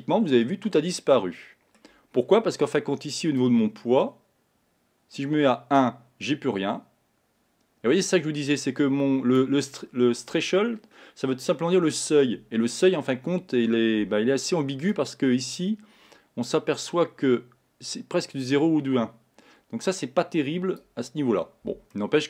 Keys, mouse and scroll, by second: 2.2-3.5 scroll down 2, 3.5-6.5 drag, 15.1-18.1 drag, 22.1-22.2 middle drag.